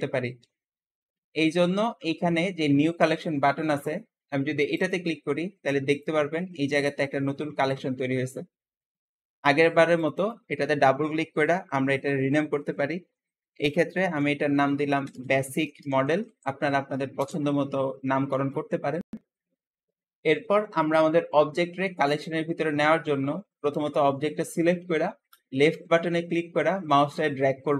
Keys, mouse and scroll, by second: 4.6-5.9 drag, 9.8 click, 10.1-13.2 drag, 15.0 BackSpace, 20.6 click, 25.2-27.0 drag.